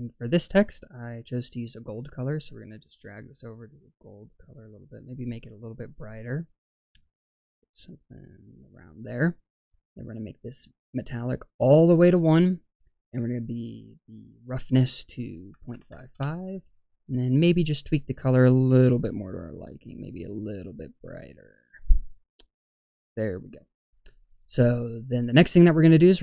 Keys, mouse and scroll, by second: 1.5 click, 11.0 click, 14.4-16.1 drag, 15.8 KP_5, 17.4 click.